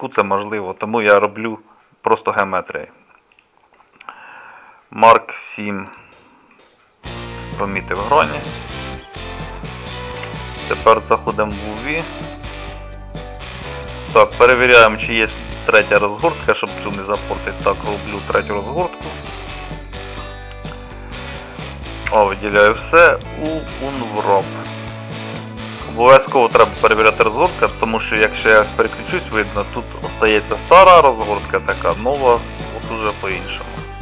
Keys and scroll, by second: 10.2 a.